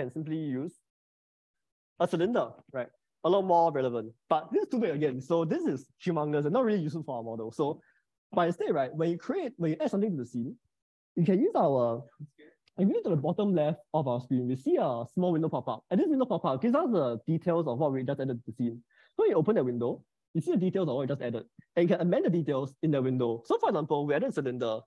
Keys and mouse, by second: 0.6-2.1 drag, 19.4 click, 24.0-24.8 drag.